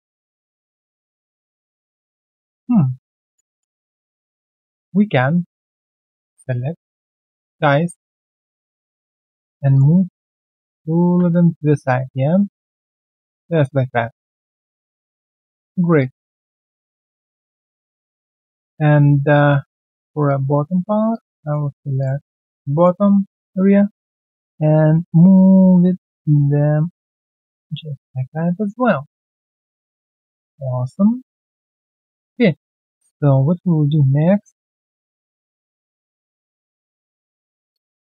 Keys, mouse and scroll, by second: 0.2 alt+scroll down 1, 1.0 alt+middle click, 1.3-1.7 alt+scroll down 1, 1.7 alt+middle click, 2.2 alt+right click, 3.5 alt+click, 3.8 alt+middle click, 5.1 alt+right click, 7.5 alt+right click, 7.8 alt+middle click, 8.4 alt+click, 8.7 alt+middle click, 9.0 alt+right click, 9.9 alt+right click, 10.2 alt+middle click, 13.4 3, 14.3 alt+middle click, 14.6 alt+click, 15.1-15.4 alt+scroll down 1, 15.5 right click, 15.9 alt+click, 16.2 alt+middle click, 17.8 alt+right click, 19.4-20.7 scroll down 1, 20.8 alt+right click, 21.1 alt+click, 21.4 alt+middle click, 22.2 alt+right click, 22.4 alt+middle click, 22.7 alt+right click, 23.0 alt+middle click, 27.8 alt+scroll down 1, 28.1 alt+middle click, 28.4-28.8 alt+scroll down 1, 28.8 alt+middle click, 29.0-29.5 alt+scroll down 1, 29.5 alt+middle click, 30.5 alt+right click, 30.9 alt+middle click, 31.2 alt+right click, 31.9 alt+middle click, 32.1 alt+right click, 32.5 alt+middle click, 34.7 shift+click.